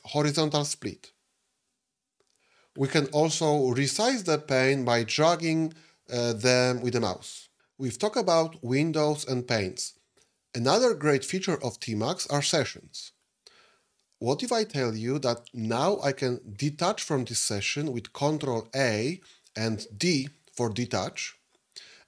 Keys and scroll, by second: 18.2 ctrl+a, 20.0 d.